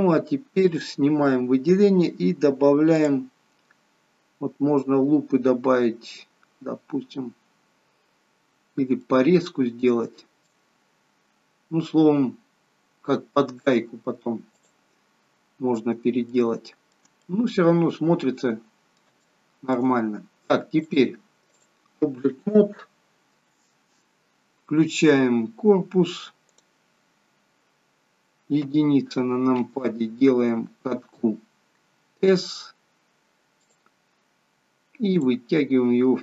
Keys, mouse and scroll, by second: 0.7 click, 2.9 click, 8.3-8.8 scroll up 3, 9.1 middle click, 10.8-11.3 scroll down 2, 14.6 click, 15.2 scroll down 2, 17.1 shift+middle click, 17.1 scroll down 1, 17.3 middle click, 19.5 middle click, 20.8 click, 27.1 click, 27.3 scroll down 5, 28.8 KP_1, 31.9 s, 35.2 click.